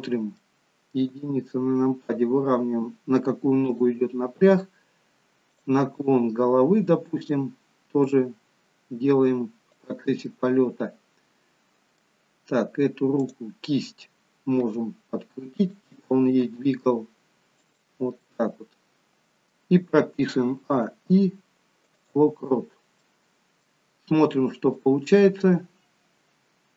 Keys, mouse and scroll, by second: 0.1-0.6 scroll up 2, 0.6 middle click, 1.4 g, 5.7 click, 6.7 g, 10.6 middle click, 13.4 click, 14.9 r, 16.8 g, 18.4 middle click, 20.6 a, 22.4 i, 22.8-23.2 scroll down 2, 23.2 middle click, 25.1 click.